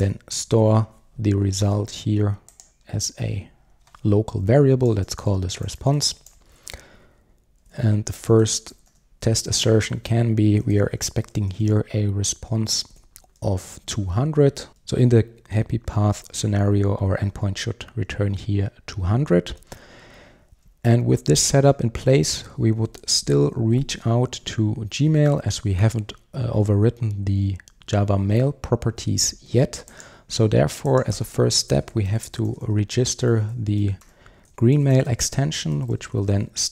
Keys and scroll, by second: 0.3 Return, 9.7 Return, 33.3 Return.